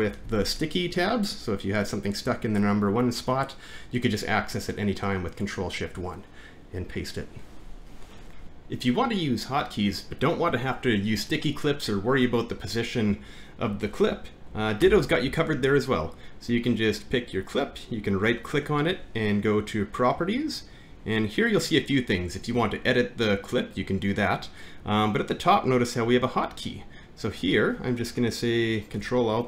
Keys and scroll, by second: 0.2 alt+`, 8.4 ctrl+F9, 14.8 alt+`.